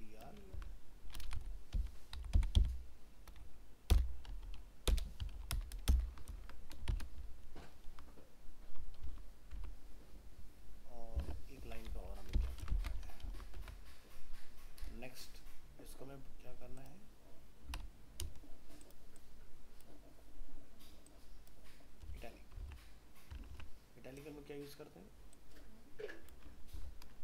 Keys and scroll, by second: 0.5 ctrl+x, 6.3 ctrl+v, 9.6 alt+Tab, 12.6 ctrl+c, 13.0 ctrl+v, 13.6 alt+Tab, 22.6 alt+Tab, 26.8 ctrl+x.